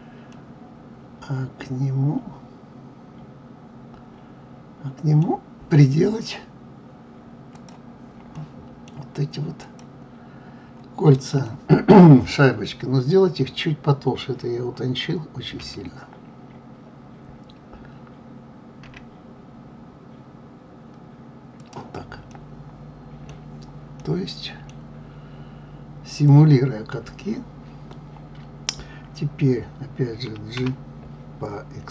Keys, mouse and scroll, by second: 0.3-3.3 middle drag, 7.5 click, 8.3-9.6 middle drag, 9.6 click, 11.4-12.6 middle drag, 12.6 scroll up 1, 13.3 scroll down 1, 15.6 s, 22.3-26.2 middle drag, 26.2 click, 30.6 g.